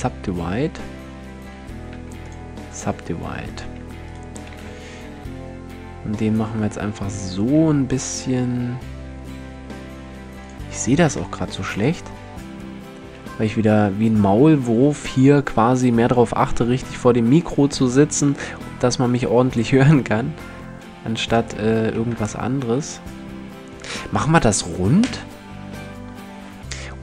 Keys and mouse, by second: 1.5 w, 3.1-5.5 drag, 4.1 s, 10.1 click, 10.8 shift+space, 11.4 click, 11.7 click, 12.6 s, 18.7 click, 19.9 s, 20.5 click, 21.1 a, 21.3 click, 21.6 Tab, 23.9 KP_1.